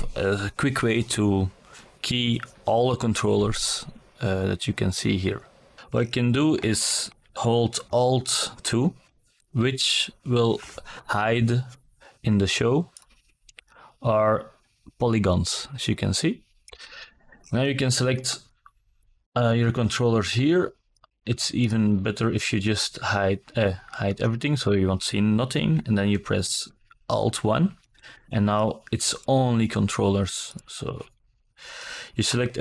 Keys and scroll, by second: 5.6 alt+KP_2, 23.0 alt+KP_1.